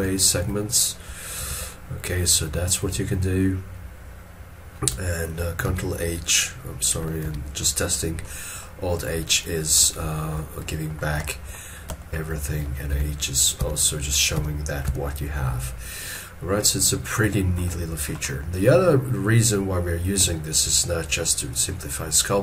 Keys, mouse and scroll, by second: 0.0 shift+h, 1.4 shift+h, 5.7 ctrl+h, 7.2 alt+h, 8.2 middle click, 10.1 shift+middle click, 12.0 shift+middle click, 16.1 middle click, 17.8 shift+middle click.